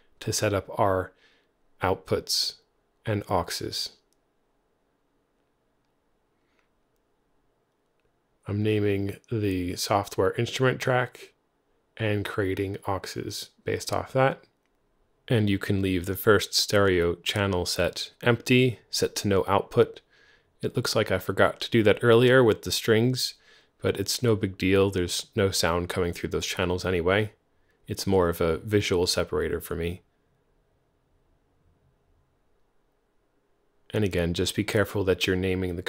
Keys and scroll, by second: 1.2 super+w, 2.7 x, 7.0-9.3 typing, 30.6 Right, 31.5 alt+Left, 32.0 alt+Left, 32.5 alt+shift+Right, 32.6-33.8 typing, 35.2 super+a.